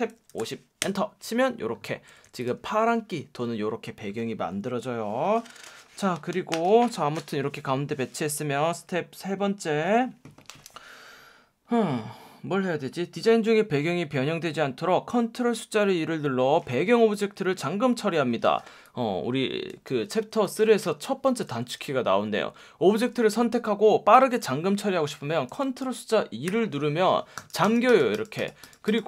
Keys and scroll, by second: 0.0-0.9 typing, 2.1 v, 20.5 super+z, 26.5 super+2.